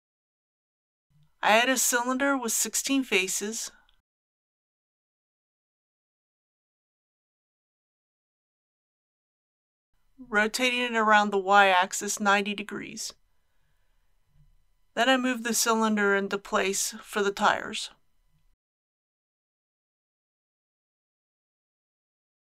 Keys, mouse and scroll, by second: 1.1 click, 1.7 shift+a, 4.0 click, 6.7 KP_1, 6.9 KP_6, 7.1 Tab, 8.5 click, 10.0 r, 10.9 y, 11.2 KP_9, 11.4 KP_0, 12.6 g, 13.9 x, 16.7 click, 17.6 KP_3, 19.2 g, 19.9 shift+x.